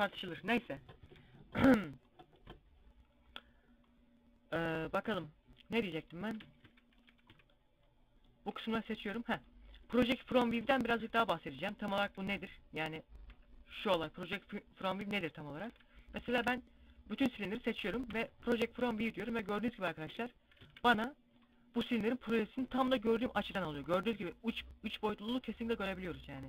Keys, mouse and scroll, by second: 0.7 z, 1.8 middle click, 6.4 z, 6.7 middle click, 7.0 c, 8.4 right click, 9.1 middle click, 9.7 middle click, 10.4-10.8 scroll down 2, 10.8 middle click, 11.3 z, 11.7 z, 12.1 a, 13.1 u, 19.1 scroll up 3, 20.2 scroll up 2, 20.2 a, 20.7 scroll up 1, 23.0-23.7 scroll down 4, 23.6 a, 26.2 scroll down 5.